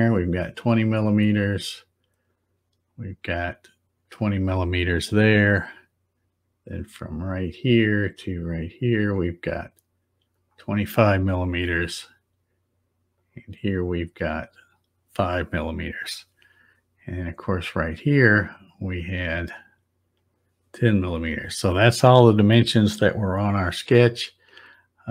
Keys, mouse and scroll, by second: 0.2 click, 2.2 click, 4.0 click, 7.5 click, 8.9 click, 10.3 click, 13.1 click, 14.6 click, 17.7 click, 18.8 click, 20.1 click, 21.1 click.